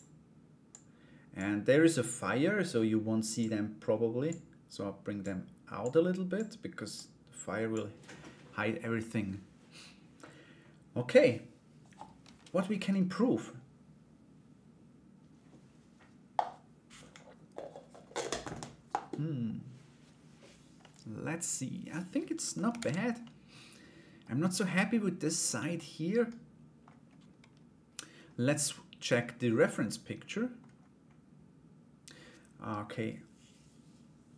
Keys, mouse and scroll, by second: 0.2 click, 1.6-4.8 drag, 5.4 click, 6.5 click, 8.6-9.8 middle drag, 20.4-22.1 middle drag, 22.3 ctrl+s, 22.8-23.8 middle drag, 23.8 scroll down 1, 24.2 scroll up 1, 24.3 middle click, 24.5-25.3 scroll down 1, 25.3 scroll up 1, 25.4 middle click, 26.4-28.0 scroll down 1, 28.0-28.8 scroll down 1, 28.8-29.2 scroll down 1, 29.2 scroll up 1, 29.3 middle click.